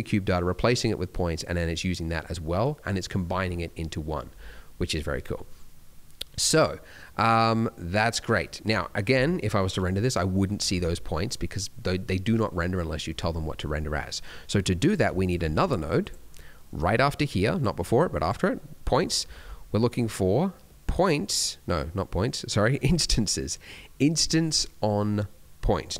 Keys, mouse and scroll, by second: 1.4 click, 2.0 middle click, 8.3 scroll down 1, 8.6-9.3 scroll up 1, 9.3 F12, 10.7 Escape, 13.6 middle click, 13.9 scroll down 1, 14.2 middle click, 14.8 click, 15.2 shift+click, 15.4 g, 17.3 click, 18.2 click.